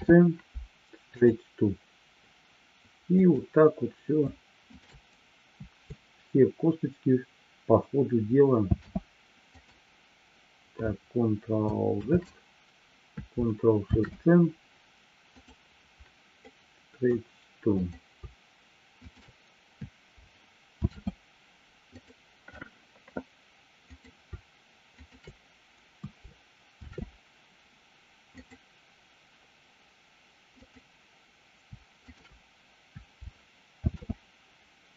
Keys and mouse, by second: 8.5 ctrl+shift+c, 12.4 ctrl+z, 13.9 ctrl+shift+c, 16.5 middle click, 17.8-18.5 drag, 19.0 shift+click, 20.8 ctrl+shift+c, 23.9-24.5 drag, 25.0 shift+click, 26.8 ctrl+shift+c, 30.6-31.2 drag, 32.0 shift+click, 33.8 ctrl+shift+c.